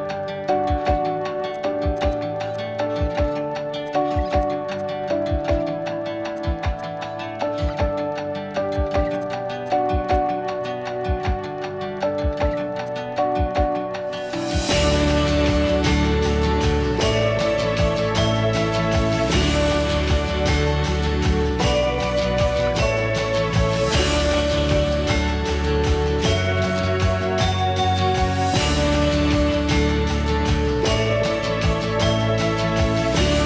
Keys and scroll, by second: 1.3 Escape, 2.4 m, 3.4 Escape, 4.7 p, 7.0 Escape, 9.8 m, 12.2 Escape, 13.8 p, 18.8 Escape, 19.4 q, 21.4-22.4 typing, 27.2 p, 31.7 Escape.